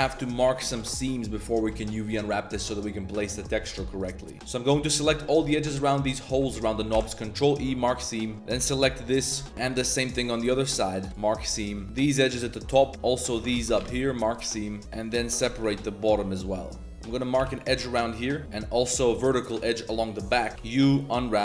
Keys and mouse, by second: 0.3 alt+shift+click, 0.8 ctrl+z, 1.0 alt+shift+click, 1.4 shift+click, 1.8 shift+click, 2.2 shift+click, 3.2 alt+shift+click, 3.7 ctrl+z, 5.3 shift+click, 5.5 z, 6.2 shift+click, 6.4 z, 6.6 click, 6.9 ctrl+e, 8.2 click, 8.3 alt+2, 8.6 ctrl+e, 9.2 click, 11.1 ctrl+z, 11.1 ctrl+e, 11.7 click, 11.8 alt+shift+2, 12.6 shift+click, 13.4 ctrl+z, 13.9 ctrl+e, 14.7 shift+click, 14.8 alt+shift+2, 15.4 ctrl+z, 16.1 z, 16.5 click, 16.9 alt+2, 17.3 click, 17.4 ctrl+e, 18.2 click, 18.7 click, 19.0 z, 19.8 click, 20.3 z, 20.5 2.